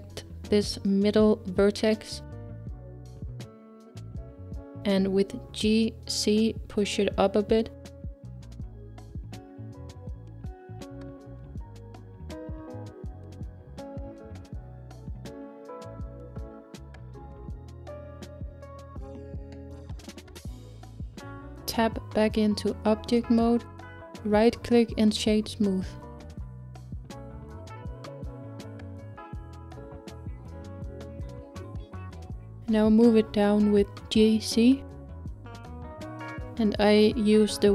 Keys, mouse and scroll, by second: 4.0 click, 5.0 middle click, 6.0 g, 10.1-12.1 middle drag, 12.1 g, 15.2-21.3 middle drag, 21.4 Tab, 22.0-22.8 scroll down 3, 22.8-25.4 middle drag, 25.4-29.1 right drag, 27.1-31.7 middle drag, 31.7 KP_1, 33.1-36.1 scroll up 3, 36.1 scroll up 1, 36.1 g.